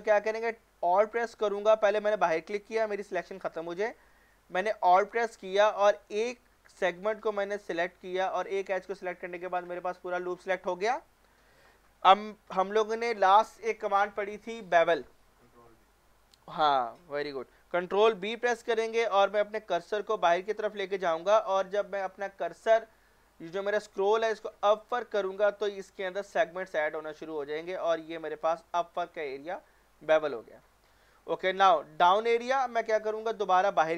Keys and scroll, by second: 18.2 ctrl+b.